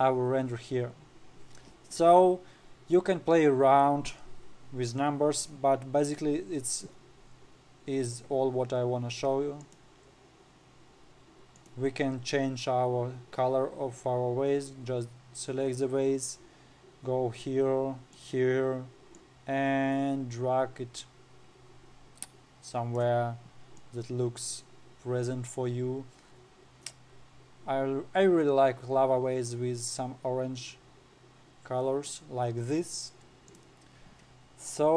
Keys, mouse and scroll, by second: 1.5-2.7 scroll down 1, 10.1 click, 10.6-12.1 scroll down 7, 12.1 click, 18.7 click, 34.0 click.